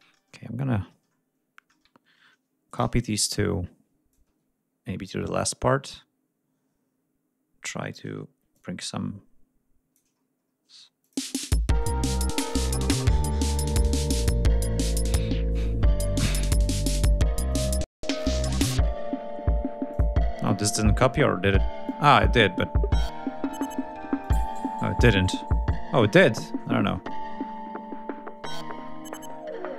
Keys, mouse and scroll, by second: 0.5 scroll up 2, 1.9 scroll up 2, 2.7 click, 3.3 ctrl+click, 4.1 ctrl+click, 8.1 ctrl+scroll up 2, 10.2 ctrl+scroll up 2, 10.5 ctrl+scroll down 2, 11.0 ctrl+click, 11.2 ctrl+space, 11.9 ctrl+scroll down 2, 12.1 ctrl+scroll up 2, 13.6 ctrl+scroll down 2, 14.2 ctrl+click, 14.7 ctrl+scroll down 3, 16.0 ctrl+scroll up 2, 17.5 click, 19.8 click, 20.5 ctrl+scroll down 2, 20.7 ctrl+scroll up 2, 21.8-23.7 drag, 24.2-26.5 drag, 27.2 ctrl+scroll down 2, 28.5 g, 29.1 ctrl+scroll up 2.